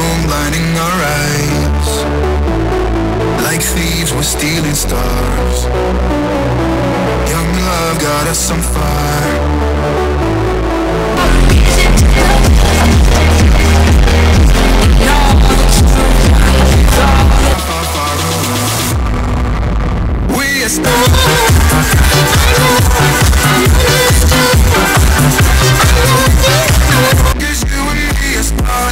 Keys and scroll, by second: 17.5 Page_Down, 27.7 Page_Down.